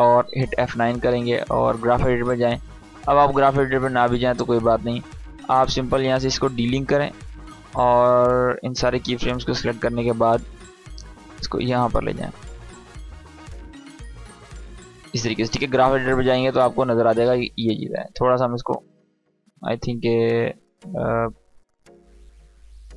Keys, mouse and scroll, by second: 0.2 F9, 1.6 click, 6.0-9.7 drag, 12.5 space, 14.7 space, 15.3-18.1 drag, 20.8-22.3 drag.